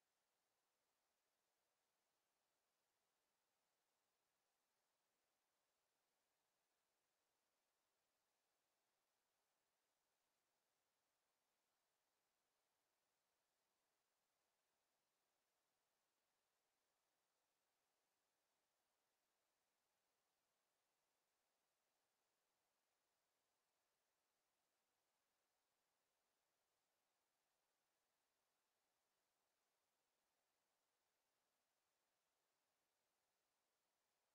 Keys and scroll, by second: 2.0 1, 2.3 Return, 5.7 ., 6.0 5, 6.3 Return, 21.0 space, 27.0 w, 33.2 w.